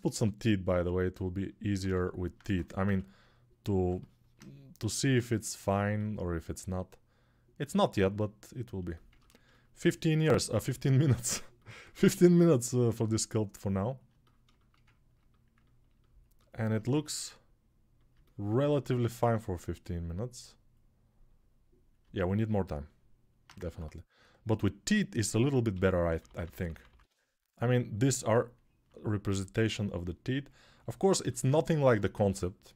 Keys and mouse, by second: 1.5 Tab, 2.9 s, 3.6-4.8 alt+middle drag, 4.8-11.4 drag, 10.4 s, 11.4 alt+middle click, 12.4-17.9 drag, 16.6 s, 17.9-19.3 alt+middle drag, 22.1 ctrl+alt+click, 22.3-25.0 ctrl+alt+right drag, 23.4 ctrl+Tab, 25.0-27.1 middle drag, 25.5-26.8 typing, 27.1-31.2 drag, 31.0 alt+q, 32.1 6.